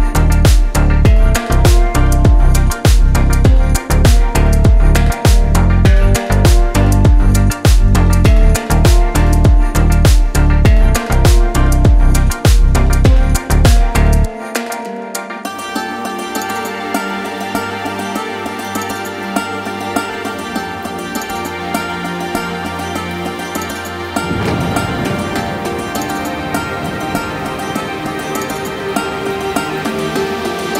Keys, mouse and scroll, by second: 0.6 click, 2.1 g, 2.2 z, 4.4 click, 6.0 3, 6.2 click, 7.3 shift+click, 7.8 shift+click, 8.4 shift+click, 9.1 middle click, 10.3 scroll up 1, 11.5 i, 18.3-20.9 right drag, 20.9 i, 23.1 click, 23.9 middle click, 25.3 click, 26.2 ctrl+click, 27.4 x.